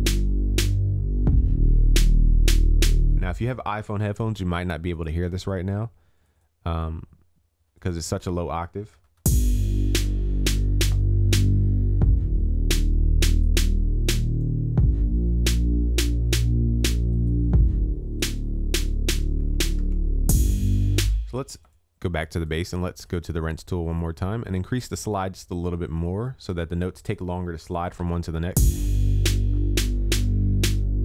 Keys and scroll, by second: 3.9 ctrl+s, 9.1 ctrl+s, 19.9 ctrl+s, 27.6 ctrl+s.